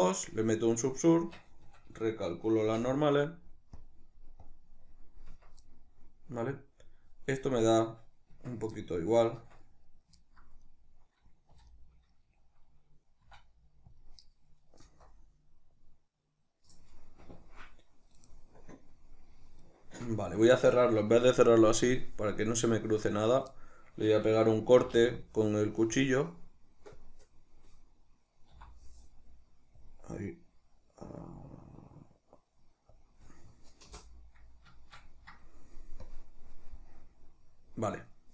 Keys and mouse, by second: 0.1-3.5 middle drag, 0.9 Tab, 1.3 a, 2.4 shift+n, 3.5 click, 4.2 click, 4.6 click, 5.0 Tab, 5.4-10.4 middle drag, 8.0 Tab, 9.1 Tab, 10.4 right click, 11.2 3, 11.4 right click, 13.0 e, 13.7 click, 18.7-22.0 middle drag, 22.0 click, 22.7-36.2 middle drag, 24.9 k, 34.1 Return, 36.2 click, 36.9-38.3 middle drag.